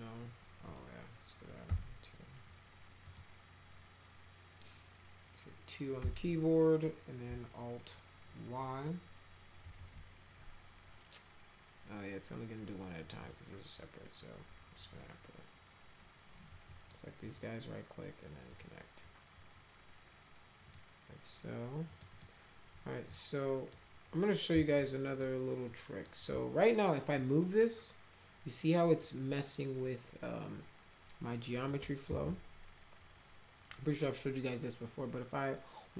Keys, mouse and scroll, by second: 0.7 click, 1.7 2, 3.1 click, 6.0 2, 9.6 alt+y, 13.2 right click, 16.7 click, 17.2 right click, 18.5 click, 20.7 click, 21.9 click, 22.1 click, 23.1 click, 24.8 alt+click, 25.7 alt+click, 27.2-31.7 drag, 32.1 ctrl+z.